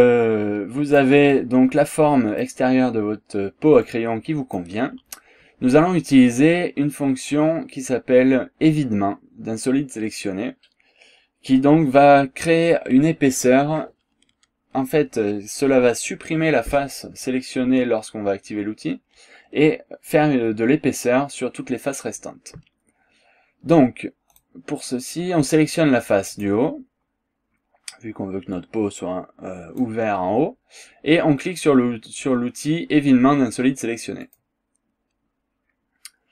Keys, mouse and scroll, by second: 1.3-2.6 drag, 2.9 scroll up 2, 3.9 click, 24.3 click, 26.4 click, 28.5-30.0 drag, 34.3 click.